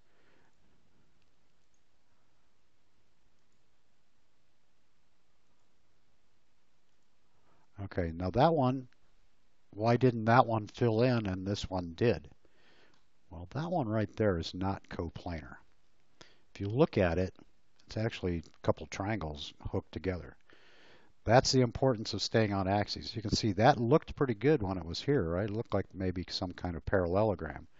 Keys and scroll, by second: 8.1 space.